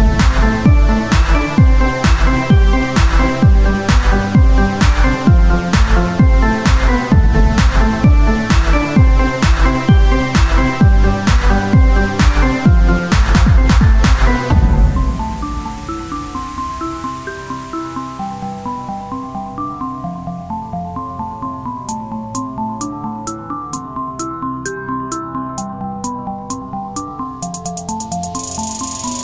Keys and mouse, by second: 0.3 s, 1.3 z, 2.7-5.1 drag, 5.1 KP_1, 6.1 z, 7.4 z, 9.7 KP_1, 9.9 z, 15.1-17.3 drag, 15.1 shift+a, 18.5 KP_3, 20.0 click, 20.0 r, 21.0 KP_1, 21.8 s, 23.2-24.2 drag, 24.2 s, 24.7 z, 25.6 z, 27.4 s, 28.2-29.2 drag.